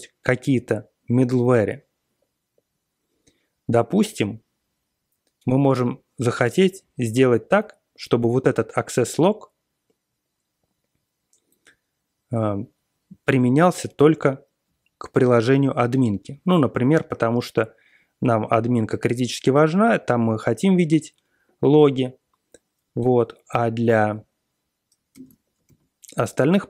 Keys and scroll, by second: 24.0 alt+x, 25.1 super+space, 25.7 ctrl+п.